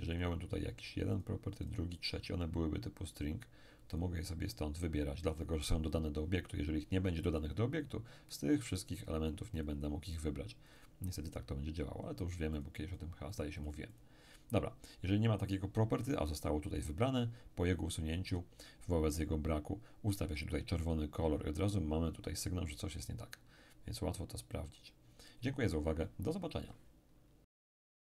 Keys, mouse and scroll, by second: 3.9 click, 5.9 click, 8.7 click, 10.7 click, 12.5-14.9 drag.